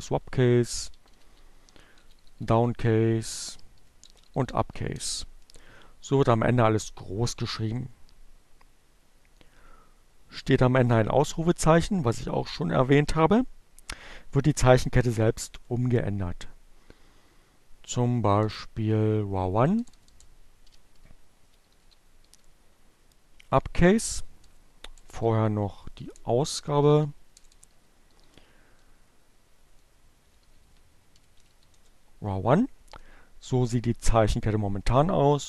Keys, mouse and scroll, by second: 0.5-4.0 typing, 16.1 Up, 16.7 BackSpace, 18.8-21.6 typing, 24.2 p, 25.5-27.2 typing, 28.8-29.9 typing, 34.1 Up, 35.3 BackSpace.